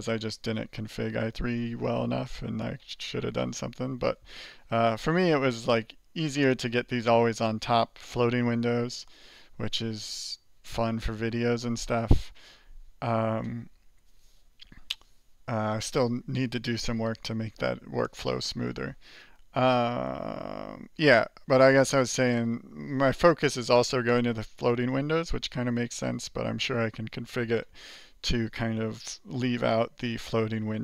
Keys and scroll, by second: 21.7 alt+j, 22.0 alt+j, 22.2 alt+j, 22.9 alt+j.